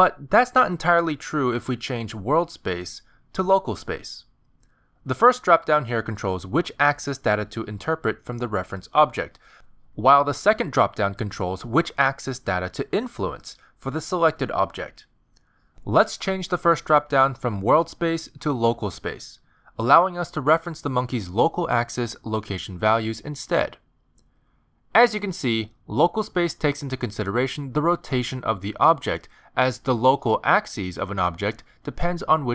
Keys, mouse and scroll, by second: 2.7 click, 7.1 click, 11.2 click, 16.7 click, 22.4 click, 25.2 click, 26.3 click, 27.2 click, 29.1 middle click, 29.8 click, 30.6 middle click, 31.4 g, 32.4 middle click.